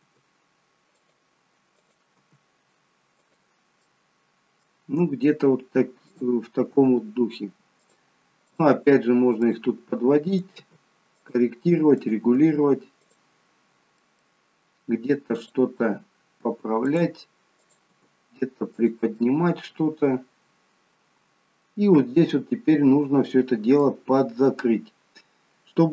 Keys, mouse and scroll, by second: 1.7 click, 2.1 g, 3.8 middle click, 6.1 click, 6.7 g, 8.5 click, 8.8 g, 10.3 click, 10.6 g, 12.0 click, 12.2 g, 13.5-13.9 scroll down 2, 13.9 middle click, 15.4 click, 15.8 g, 17.6 click, 17.9 g, 19.1 middle click.